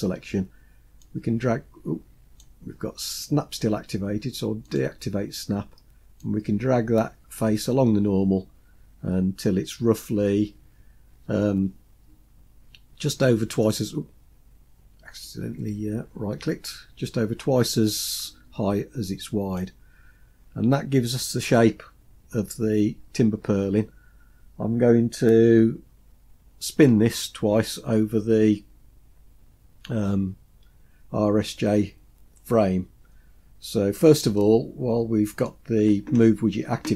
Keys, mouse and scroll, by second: 1.1-2.5 drag, 4.7 click, 6.3-13.8 drag, 15.3-19.6 drag, 20.5-21.8 scroll down 2, 33.3 scroll down 2, 34.4-35.6 middle drag.